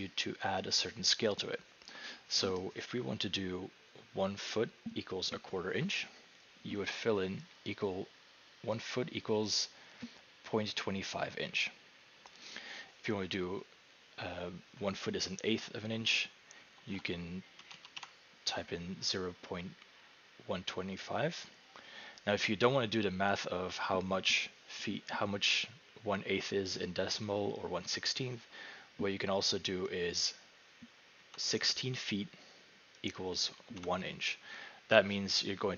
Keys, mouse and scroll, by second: 7.7 click, 12.5 click, 16.5-18.5 typing, 30.2 click, 31.0-31.9 typing, 33.2 click, 33.8-34.6 typing.